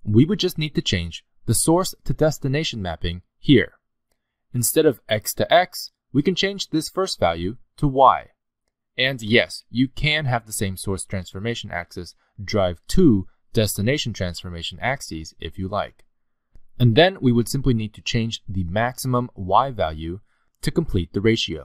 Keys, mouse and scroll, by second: 7.0 click, 18.4 click.